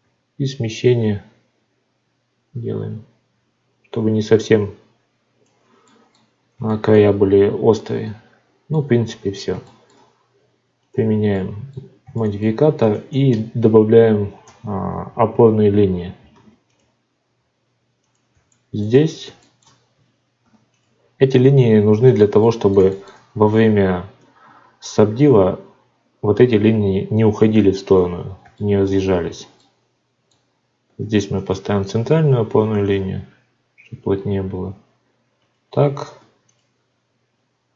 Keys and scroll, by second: 13.1 Tab, 16.3 ctrl+r, 21.5 ctrl+r, 30.8 ctrl+r, 32.4 ctrl+r, 36.1 ctrl+r.